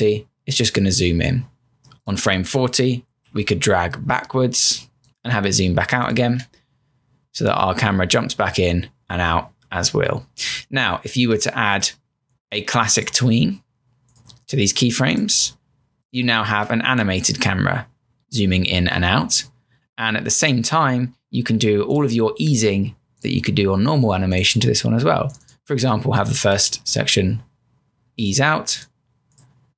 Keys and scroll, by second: 1.1 Return, 3.2 F6, 6.3 Return, 16.5 Return, 26.8 Return.